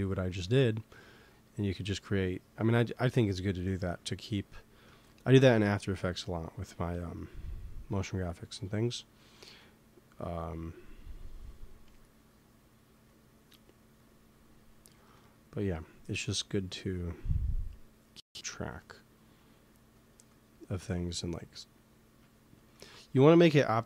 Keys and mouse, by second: 1.4-3.3 drag, 4.8 ctrl+s, 8.5-11.9 drag, 13.0-15.7 drag, 14.8 ctrl+s, 16.7-18.7 drag, 19.9-21.7 drag, 22.7 ctrl+s.